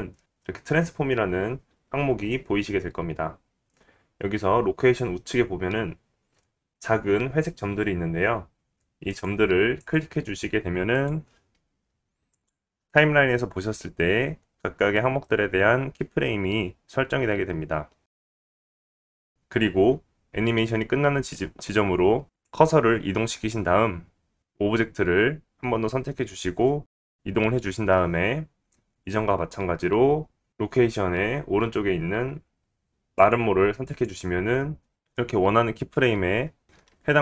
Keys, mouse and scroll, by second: 9.0 click, 9.7 click, 10.8 click, 12.2 click, 18.8-25.8 drag, 25.8-31.1 middle drag, 26.8 g, 31.1 click, 31.2-32.5 middle drag, 32.5 click, 32.7-33.2 middle drag, 33.2 click, 33.4-37.2 middle drag.